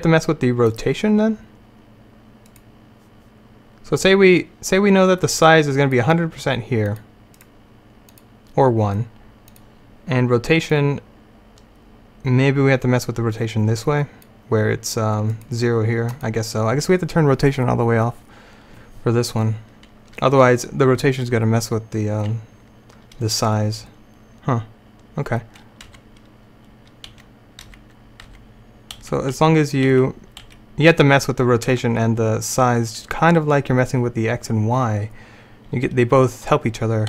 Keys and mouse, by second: 3.1-5.4 right drag, 5.4-7.4 drag, 7.4-9.6 right drag, 9.6-12.6 drag, 25.9 Right, 27.2 Right, 27.7 Right, 28.4 Right, 29.1 Left, 29.4 Left, 30.0 Left, 30.5 Left, 31.8 Right.